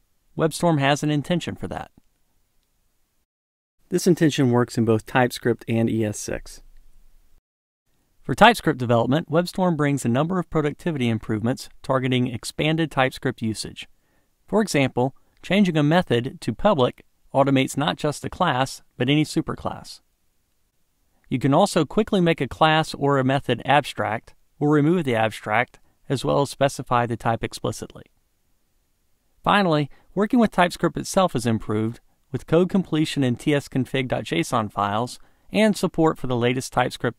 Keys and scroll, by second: 16.4 alt+Return.